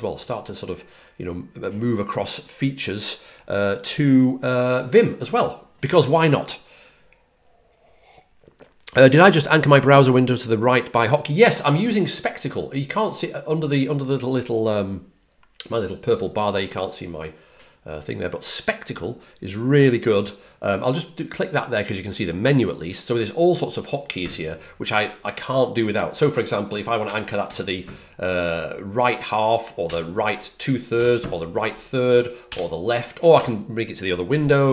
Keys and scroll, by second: 27.4 alt+super+Right, 29.8 alt+super+Right, 32.4 alt+super+Left, 33.3 ctrl+alt+super+Right.